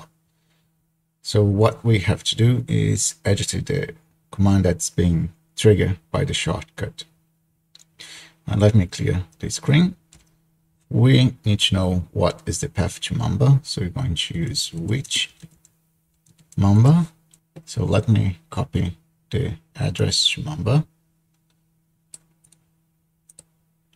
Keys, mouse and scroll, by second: 10.3 ctrl+l, 14.4-16.8 typing, 20.0-22.7 drag, 22.8 click, 23.0 click, 23.3 click.